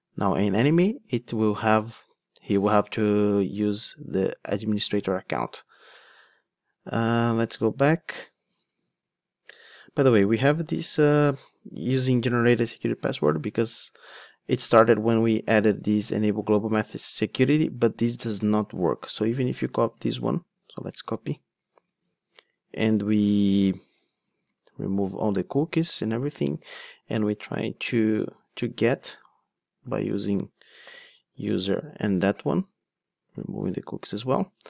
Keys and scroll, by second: 20.9 super+c.